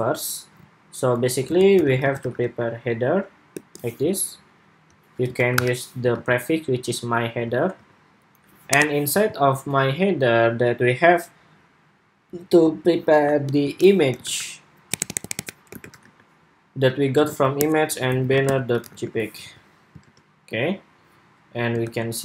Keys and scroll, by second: 5.9 super+s, 9.0 super+s, 19.2 super+s, 19.8 super+Tab, 21.6 super+r.